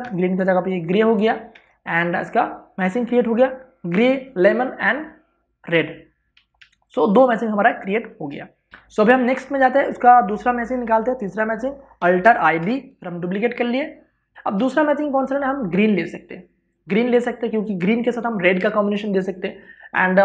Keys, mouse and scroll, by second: 0.7 i, 1.4 click, 2.2 alt+BackSpace, 2.6 ctrl+d, 7.1 ctrl+v, 7.4 ctrl+space, 7.6 ctrl+click, 8.7 d, 8.7 Return, 10.7 click, 12.9 alt+i, 13.0 alt+d, 13.3 Return, 14.3 ctrl+space.